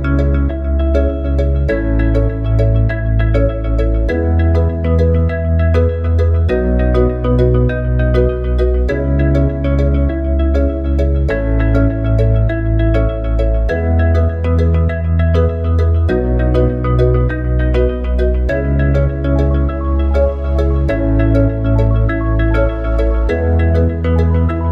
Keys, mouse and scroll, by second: 2.1-7.4 drag, 9.0-12.1 drag, 12.1 ctrl+c, 13.1 ctrl+v, 14.3 click, 17.5 click.